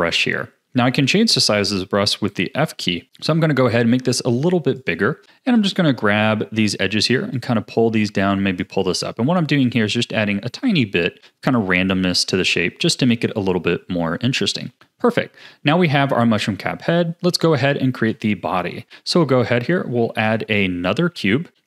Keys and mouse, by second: 2.5 f, 5.5-6.6 drag, 7.3 click, 8.2 click, 9.0 click, 9.6 click, 10.6 click, 11.5 click, 12.2 click, 12.8 middle click, 14.7 shift+middle click, 18.1 Tab, 19.2 a, 19.9 shift+a.